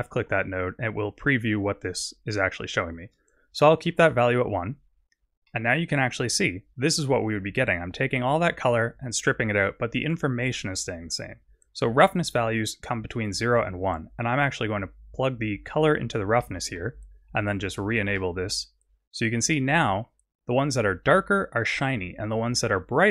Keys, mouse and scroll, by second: 3.1 click, 5.5 middle click, 14.2 click, 16.5 middle click, 18.0 ctrl+shift+click, 19.5 middle click.